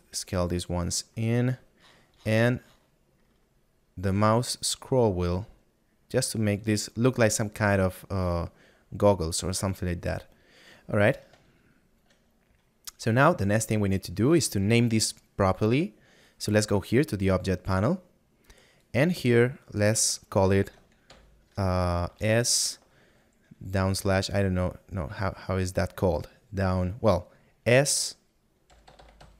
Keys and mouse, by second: 16.4 click.